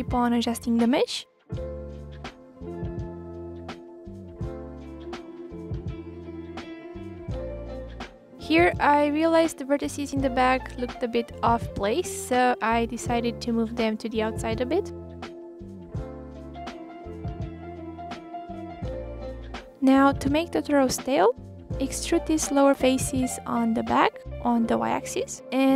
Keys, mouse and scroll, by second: 0.0 KP_1, 0.0-0.7 scroll up 2, 0.1 middle click, 0.7 click, 0.8 scroll down 1, 0.9 middle click, 1.3 click, 1.6 m, 2.6 click, 3.3 m, 3.8 click, 3.9 m, 4.2 middle click, 5.6 middle click, 5.8 click, 6.5 click, 7.1 click, 7.4 click, 7.6 click, 8.6 click, 9.2 click, 10.2 click, 10.8 click, 10.9 click, 11.4 shift+click, 11.5 shift+click, 11.6 shift+click, 11.7 middle click, 11.9 click, 12.1 click, 12.3 click, 13.7 m, 13.8 click, 16.2 shift+click, 16.3 shift+click, 16.4 shift+click, 16.5 shift+click, 16.9 KP_3, 17.1 click, 17.4 ctrl+z, 17.5 click, 17.9 g, 18.7 click, 19.1 click, 19.4 click, 19.8 click, 20.3 click, 20.4 scroll down 2, 20.5 scroll up 1, 20.8 click, 21.3 scroll down 1, 21.5 middle click, 22.3 KP_3, 22.5 scroll down 1, 22.6-23.0 scroll up 1, 23.0 e.